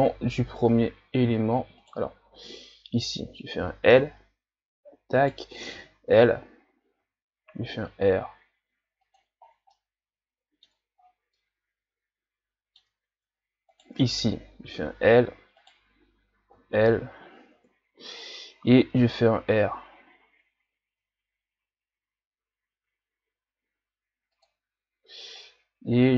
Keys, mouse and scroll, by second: 1.3 t, 1.8 right click, 3.9 l, 5.2 right click, 5.8 l, 7.0 r, 9.5 scroll down 3, 9.7-11.1 middle drag, 11.1 scroll down 1, 11.4-13.7 middle drag, 13.7 right click, 14.7 l, 15.6 right click, 16.6 l, 17.6 KP_3, 18.2 scroll up 2, 19.0 r, 25.4-26.1 drag.